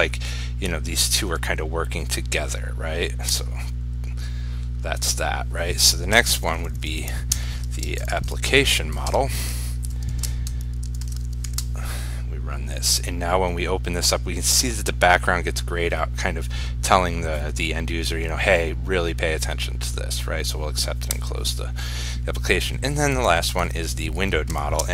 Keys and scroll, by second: 10.2 ctrl+s, 11.3 ctrl+shift+s, 11.7 ctrl+r.